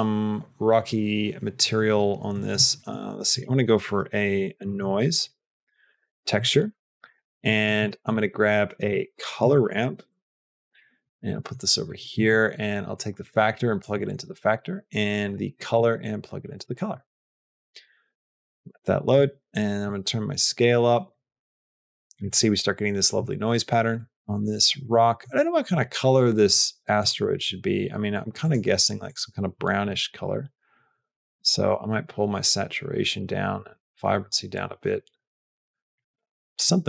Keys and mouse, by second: 2.2 middle click, 2.6 shift+a, 7.0 click, 7.3 click, 7.7 shift+click, 7.8 shift+a, 10.9 click, 11.3 middle click, 11.8 click, 12.0 middle click, 12.8 click, 13.9 middle click, 14.4 click, 15.6 click, 16.7 middle click, 17.5 middle click, 19.8-22.1 drag, 23.8 click, 25.2 middle click, 26.8 click.